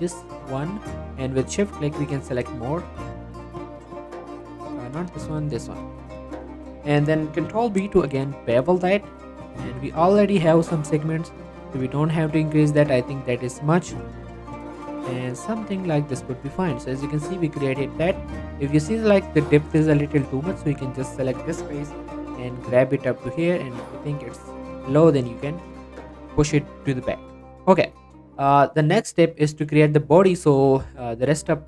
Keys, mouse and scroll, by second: 1.6 shift+click, 1.9 middle click, 2.3 shift+scroll up 1, 2.9 shift+click, 3.1 middle click, 3.9 shift+click, 4.5 ctrl+z, 5.2 shift+click, 5.5 scroll up 1, 5.6 middle click, 5.9 scroll down 1, 6.1 shift+middle click, 6.5 scroll up 1, 7.9 ctrl+b, 13.6-14.9 scroll up 1, 14.9 click, 15.5 middle click, 15.7 scroll up 1, 15.9 middle click, 16.2 Tab, 16.4 scroll down 1, 16.6 middle click, 16.9 click, 17.1 middle click, 18.1 scroll up 1, 18.3 Tab, 18.5 middle click, 19.9 click, 20.7 middle click, 21.8 g, 22.1 y, 23.3 click, 23.6 scroll down 1, 23.7 middle click, 23.9 Tab, 24.2-25.5 middle drag, 25.5 scroll down 1, 25.6 middle click, 25.8 scroll up 1, 26.1 middle click, 26.3-26.9 scroll down 2, 26.4 shift+middle click, 26.9 middle click, 29.2 shift+middle click, 29.4 scroll up 1, 29.7-31.6 middle drag.